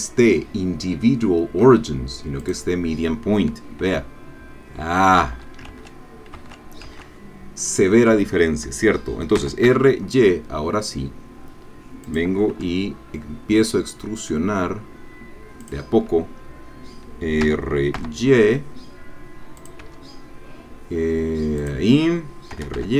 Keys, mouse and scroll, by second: 2.4 click, 3.8 e, 5.2 Escape, 5.7 ctrl+z, 9.4 r, 9.7 y, 12.0 click, 12.5 e, 15.6 click, 17.4 r, 18.0 y, 19.6 click, 19.8 e, 21.6 click, 22.5 r, 22.7 y.